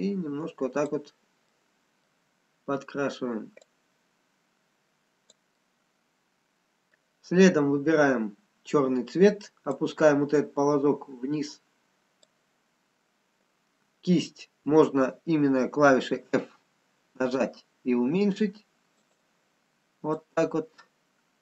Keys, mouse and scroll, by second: 2.5 middle click, 2.5-3.6 scroll down 1, 4.0 click, 4.0 scroll down 1, 5.6 middle click, 10.5 click, 14.7-16.9 scroll up 5, 17.9 f, 20.7 click.